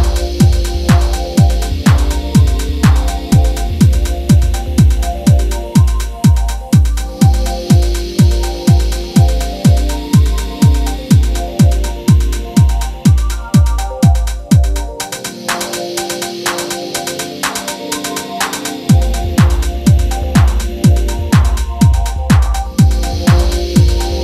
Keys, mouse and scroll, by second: 1.5 click, 2.8 scroll down 1, 2.8 middle click, 3.0 ctrl+a, 3.2 Tab, 3.3 scroll up 2, 3.4 2, 3.6 alt+shift+click, 3.8 s, 4.2 Tab, 4.4 KP_1, 4.5-5.4 scroll up 19, 4.6 shift+middle click, 4.8 shift+middle click, 4.9 Tab, 5.0 shift+middle click, 5.2 shift+middle click, 5.4 shift+middle click, 5.5 g, 6.3-6.7 scroll down 35, 6.7 middle click, 6.8 scroll up 4, 6.9 Tab, 6.9 middle click, 7.0 Tab, 7.1 middle click, 7.3 a, 7.8 u, 8.1 Tab, 8.2 ctrl+a, 8.3 Tab, 8.5 u, 9.3 click, 10.0 click, 10.3 shift+middle click, 10.5 3, 10.6 middle click, 10.7 a, 11.0 k, 11.5 a, 12.8 middle click, 13.0 ctrl+i, 13.1 middle click, 13.4 scroll up 1, 13.5 shift+middle click, 13.6-24.2 typing, 18.6 Tab, 18.8 Tab, 20.6 click, 22.3 click.